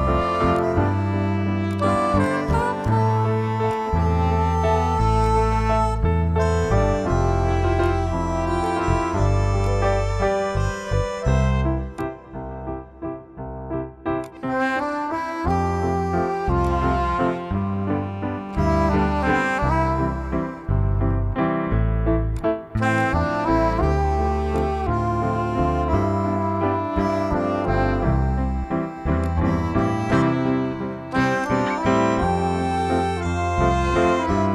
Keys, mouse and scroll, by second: 5.0 right click, 7.6 click, 11.8 click, 14.0 click, 16.4 click, 29.0 click.